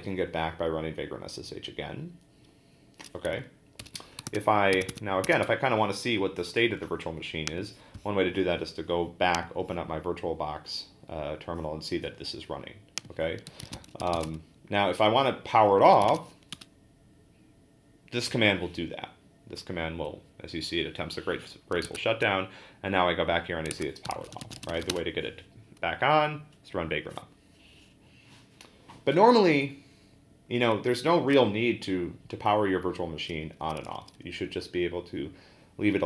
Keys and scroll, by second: 3.8 ctrl+d, 4.3 super+Tab, 13.2-16.7 typing, 21.8 super+Tab, 23.7 super+Tab, 23.8-25.3 typing.